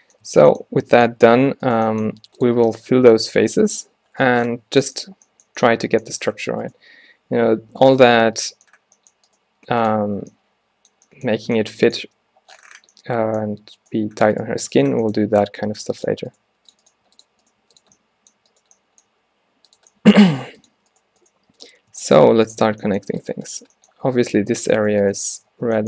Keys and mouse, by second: 0.0 a, 0.3 a, 1.7-2.4 drag, 1.9 g, 6.7-8.3 right drag, 7.6 g, 8.7 middle click, 9.6 g, 10.2 Tab, 12.1 Tab, 13.9-14.2 drag, 15.0-15.5 middle drag, 15.7 g, 16.6 g, 17.1 g, 17.7 g, 19.2 g, 20.3 g, 21.5 g, 22.8 e, 25.6 f.